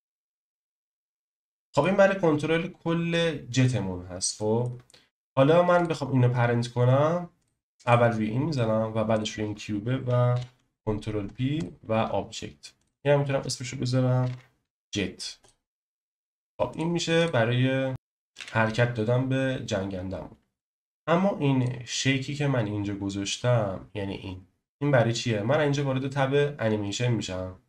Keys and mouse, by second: 0.8 click, 0.9 KP_1, 1.3-1.8 middle drag, 4.4 middle click, 5.7 click, 10.3 ctrl+p, 12.8 click, 12.9-15.4 drag, 18.3 g, 20.6-21.4 drag, 21.6 click.